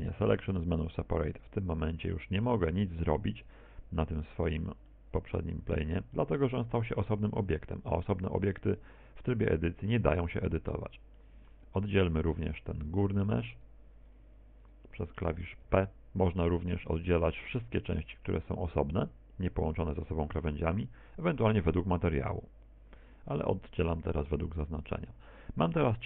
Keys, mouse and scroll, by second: 4.7 right click, 5.4 right click, 6.9 middle click, 8.2 middle click, 9.1 Tab, 10.4 right click, 11.2 click, 12.0 middle click, 13.2 middle click, 13.8 right click, 14.4 Tab, 15.1 right click, 15.6 shift+right click, 16.2 right click, 16.6 right click, 17.7 p.